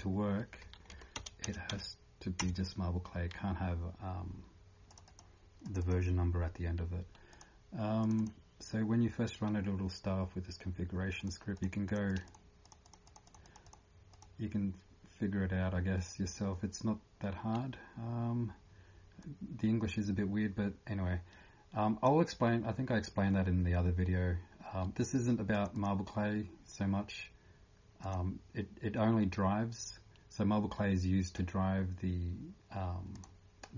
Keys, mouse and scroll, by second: 0.9 End, 1.2 BackSpace, 2.4 Return, 2.4 3, 4.9 click, 25.9 click.